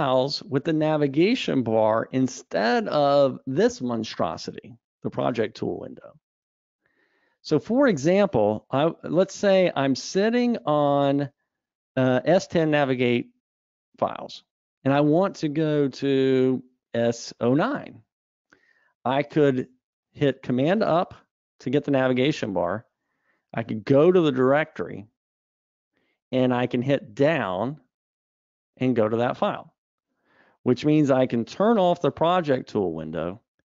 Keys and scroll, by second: 21.3 super+Up.